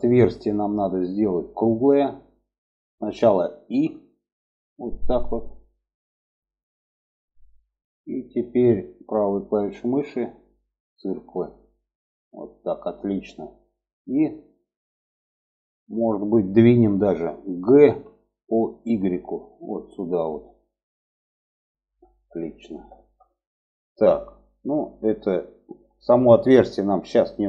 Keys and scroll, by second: 17.8 g.